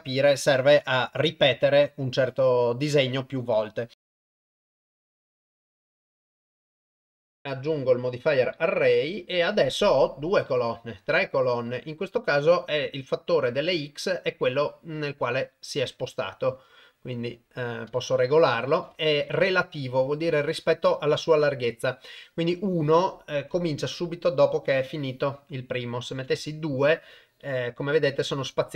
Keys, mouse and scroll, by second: 4.0 click, 4.2 click, 4.4 click, 4.5 click, 4.7 click, 4.9 click, 5.0 click, 5.1 click, 5.4 click, 5.4 click, 5.5 click, 5.6 click, 5.7 click, 5.9 click, 6.1 click, 6.2 click, 6.4 click, 6.5 click, 6.7 click, 7.2 click, 7.4-8.6 drag, 14.6-17.5 drag, 18.1 click, 26.0 click.